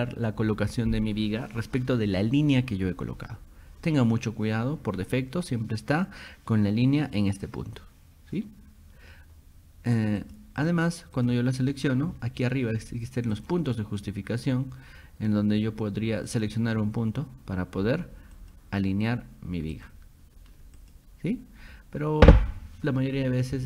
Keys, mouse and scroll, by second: 10.2 click, 10.6 click, 11.2 click, 11.6 click, 13.4 click, 16.3 click, 18.4 click, 19.7 click, 20.8 click.